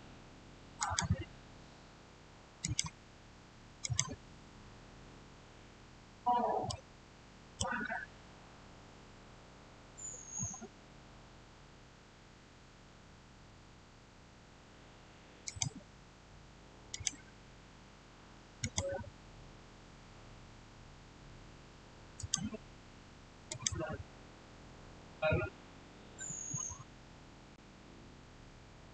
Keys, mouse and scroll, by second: 3.2 click, 4.1-5.8 scroll down 1, 6.5-9.7 middle drag, 15.3 click, 22.0 click, 25.2 scroll up 1, 27.2-28.8 scroll down 1.